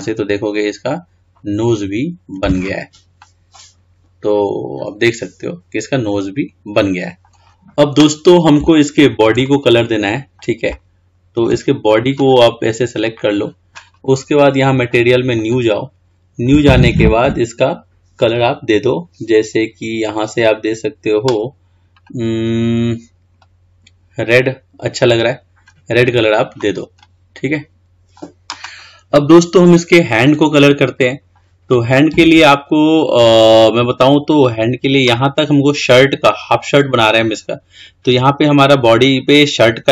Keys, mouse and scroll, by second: 0.6-1.1 scroll down 3, 1.1-3.3 scroll up 2, 3.3-6.5 middle drag, 7.6 scroll down 4, 8.7-11.8 middle drag, 11.8-12.1 scroll up 3, 12.3-13.0 drag, 15.5-19.5 drag, 22.1 click, 27.3-28.2 middle drag, 29.1-29.9 scroll up 2, 29.9-30.5 scroll down 3, 30.5-34.7 middle drag, 34.7-37.8 scroll up 2.